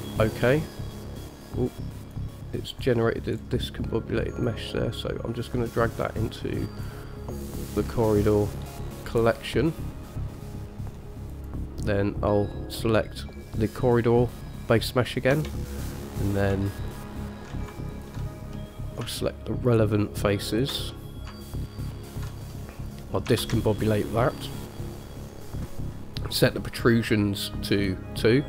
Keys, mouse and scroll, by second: 2.2 click, 3.0-3.5 scroll down 1, 3.5 scroll down 1, 4.6 click, 7.7-8.5 scroll up 1, 8.5 scroll down 2, 10.3-11.1 middle drag, 11.5 click, 15.5 Tab, 16.2 click, 16.9 alt+shift+click, 17.1 alt+shift+click, 18.1 alt+shift+click, 18.8 middle click, 19.9 alt+shift+click, 20.7 alt+shift+click, 21.1 middle click, 22.3 alt+shift+click, 22.7 middle click, 23.6 shift+a.